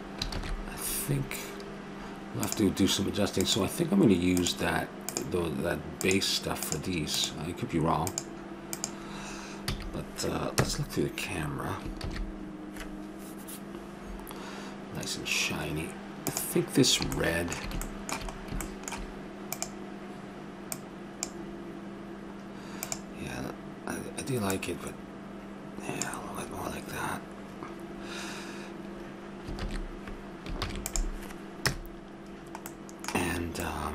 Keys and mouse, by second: 0.5 shift+z, 2.5-9.7 drag, 9.7 a, 10.6 KP_0, 12.3 shift+z, 16.3-18.3 drag, 17.3-18.8 middle drag, 17.3 right click, 19.6-21.5 drag, 23.0-24.8 drag, 29.7 shift+z, 30.6 ctrl+s, 31.7 KP_0.